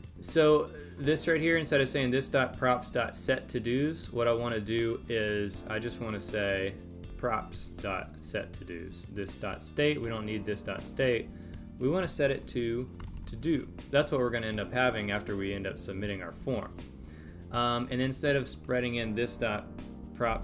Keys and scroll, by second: 7.1 Delete, 20.2 Delete.